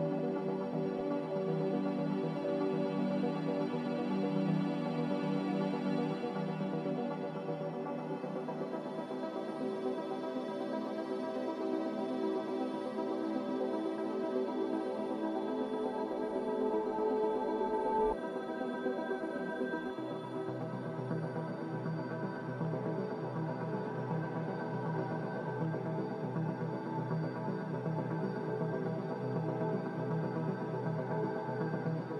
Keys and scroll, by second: 8.6 ctrl+z, 13.0 z, 20.6 z, 21.5 g, 24.4 z.